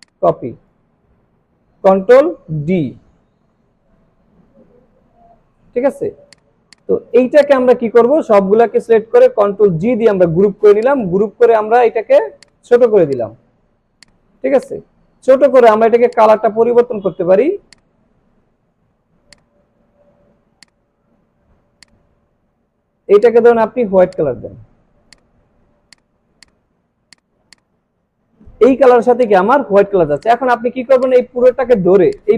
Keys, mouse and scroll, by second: 0.0-1.0 drag, 2.6 ctrl+d, 6.3-8.4 drag, 9.4 ctrl+g, 10.8-12.4 alt+shift+drag, 13.0 space, 13.1 click, 13.5-13.9 alt+scroll down 2, 13.9 space, 14.0-14.6 click, 14.4 space, 14.6-15.6 click, 15.1 space, 16.1-18.0 drag, 17.6 space, 17.7 click, 18.3 alt+scroll up 1, 19.3-19.9 drag, 20.6-21.2 alt+shift+drag, 25.6-25.9 alt+scroll down 1, 25.9 click, 26.3 space, 26.4 click, 27.4 space, 27.5 click, 29.1 space, 29.2 click, 29.8 alt+scroll down 1, 30.1 space, 30.2 click, 32.1-32.3 drag.